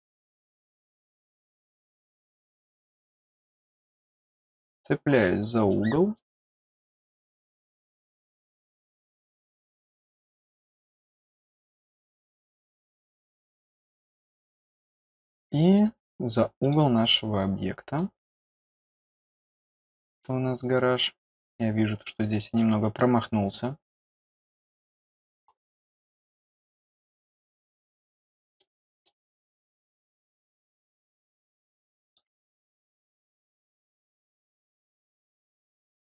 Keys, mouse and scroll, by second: 0.0 middle click, 2.5-3.0 scroll up 1, 4.7 click, 5.1-5.4 scroll down 2, 5.6 middle click, 10.4 click, 16.6 click, 17.9 middle click, 19.4-21.0 scroll up 8, 22.0 middle click, 22.4-22.7 scroll down 2, 22.9 middle click, 24.3 middle click, 25.4-26.1 scroll up 4, 27.5 click, 28.0-28.5 scroll down 2, 28.5 middle click, 29.0 scroll down 2, 30.2 middle click, 30.5-31.0 scroll up 4, 32.0 click, 33.6 scroll down 4, 34.2 middle click, 35.6-36.0 scroll up 4.